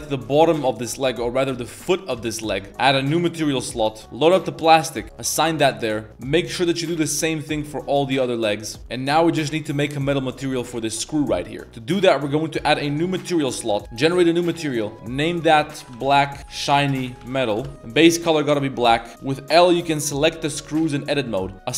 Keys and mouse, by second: 0.2 click, 0.6 click, 1.5 ctrl+KP_Add, 1.7 ctrl+KP_Add, 2.1 ctrl+KP_Add, 3.1 click, 4.3 click, 5.1 click, 5.6 Tab, 5.8 middle drag, 6.1 l, 8.0 click, 8.8 middle click, 9.1 shift+middle click, 9.5 middle click, 10.0 click, 10.5 middle click, 13.4 click, 14.1 click, 14.6-17.6 drag, 14.9 shift+BackSpace, 19.1 z, 19.7 l, 20.2 middle click, 21.1 l, 21.5 middle click.